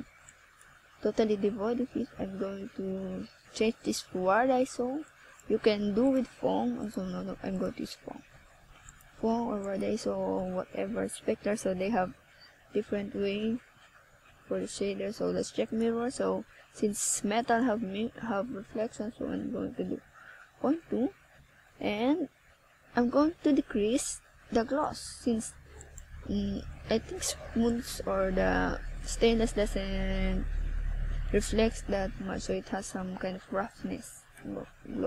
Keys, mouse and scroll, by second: 22.6 Escape, 23.6 scroll up 1, 24.6 middle click, 26.0 ctrl+s, 26.9-27.4 scroll down 4, 27.6 middle click, 28.7 right click, 30.2 x, 33.2 KP_7.